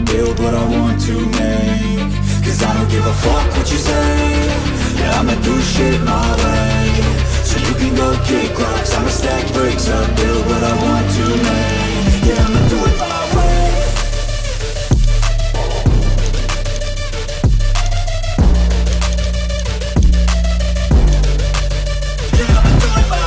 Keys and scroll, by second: 4.5-5.6 typing, 8.1-9.0 typing, 10.4 [, 14.0-14.5 typing.